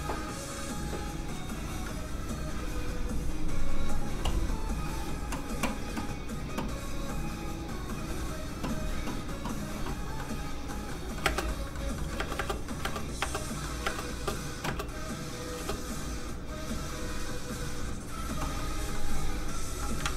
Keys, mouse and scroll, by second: 7.2 click, 10.2 middle click, 11.2 space, 11.5 middle click, 11.9 shift+middle click, 12.3 middle click, 12.3 space, 12.7 middle click, 12.8 space, 13.6 middle click, 13.6 space, 15.2 click, 15.2 space, 15.9 click, 18.6 middle click, 19.4 click, 20.0 ctrl+z.